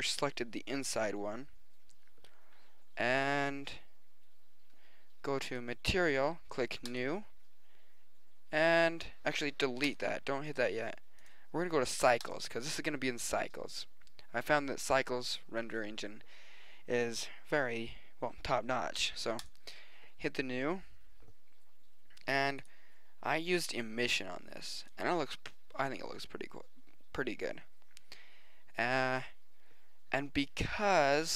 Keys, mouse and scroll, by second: 0.5 middle click, 1.1 middle click, 2.3 middle click, 4.7-5.5 middle drag, 8.9 middle click, 9.8-13.1 drag, 20.9 click, 21.5 middle click, 22.1 middle click.